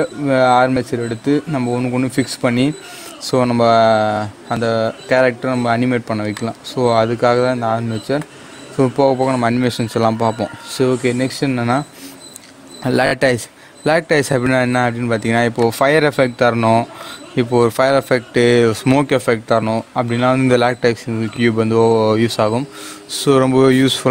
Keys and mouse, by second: 6.3-9.8 drag, 9.8 shift+a, 13.2-20.8 drag.